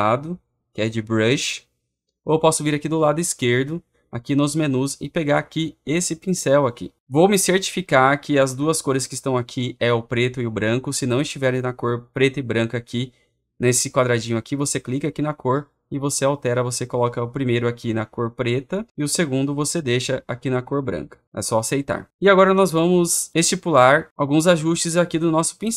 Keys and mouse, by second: 18.8 click, 20.8 click, 21.4 click.